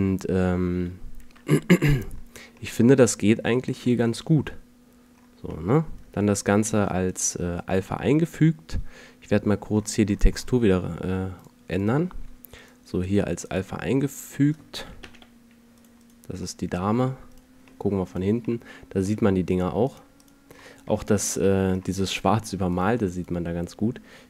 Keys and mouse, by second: 6.1 F11, 12.2 click, 14.9 click, 15.1 g, 19.1 middle click, 19.3 a, 21.1 middle drag.